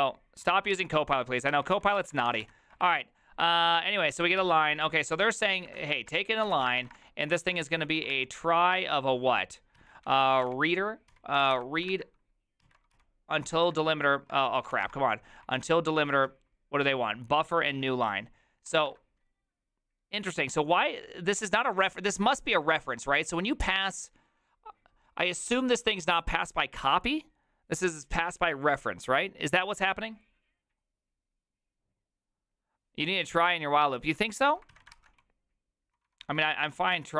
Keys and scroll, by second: 0.4 alt+{, 0.7 ctrl+c, 0.9-2.9 typing, 4.4 alt+{, 5.4-14.7 typing, 13.5 alt+y, 15.4 ctrl+y, 17.7 alt+{, 34.8 alt+{, 34.9 ctrl+c, 35.2-37.1 typing.